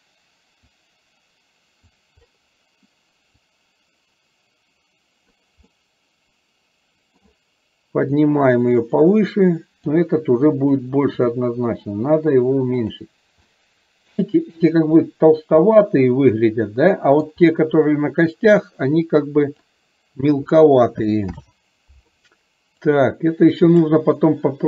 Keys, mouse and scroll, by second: 0.9-2.0 drag, 3.5-5.5 drag, 5.8-7.4 middle drag, 8.1-10.0 drag, 13.5-14.3 middle drag, 15.8-17.3 middle drag, 19.1 click, 23.1 click, 24.5-24.6 scroll up 1.